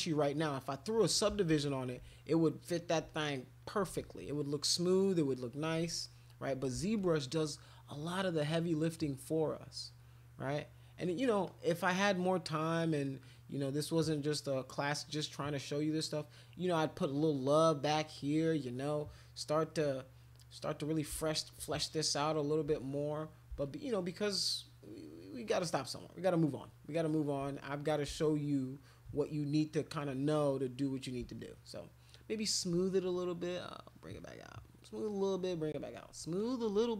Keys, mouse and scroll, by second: 0.2 click, 1.5 alt+click, 3.1 click, 4.0 alt+click, 4.3 click, 5.0 click, 6.0 alt+click, 7.0 alt+click, 8.0 click, 9.0 click, 9.3 click, 9.8 click, 10.0 click, 11.5 click, 12.9-14.3 drag, 14.4 click, 15.1 click, 15.9 click, 16.4 click, 18.0 click, 18.3 click, 18.5 click, 18.7 click, 18.9 click, 19.1 click, 20.3 click, 21.2-22.5 shift+drag, 22.7 click, 23.6-27.3 shift+drag, 27.5 click, 28.2 shift+click, 29.9 click, 30.1 click, 31.4 shift+click, 31.8 shift+click, 32.1 shift+click, 32.5 shift+click, 32.9 click, 33.6 click, 33.9 click, 34.2 click, 34.4 click, 34.6 click, 35.1 click, 36.3 alt+click.